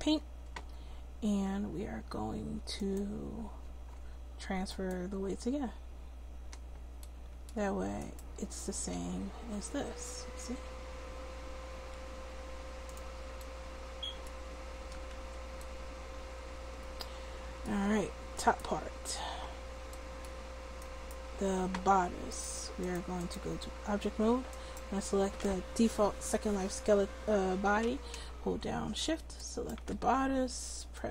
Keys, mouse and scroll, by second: 2.8-7.0 drag, 8.3 middle click, 8.9 r, 9.1-10.1 drag, 10.3 click, 14.5 a, 14.8 a, 15.1 alt+r, 22.6 click, 23.3-26.1 drag, 24.5-26.1 right drag, 29.4-30.9 right drag.